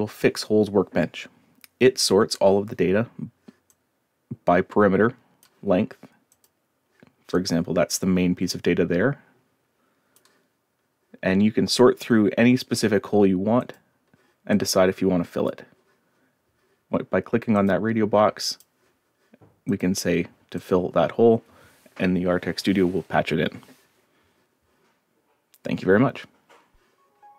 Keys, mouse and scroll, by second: 3.7-5.4 drag, 6.3 click, 7.3-10.1 drag, 11.2-12.2 scroll down 2, 12.5 scroll down 1, 13.6 click, 14.5 click, 17.6 click, 18.5 click, 19.7 click, 20.6 click.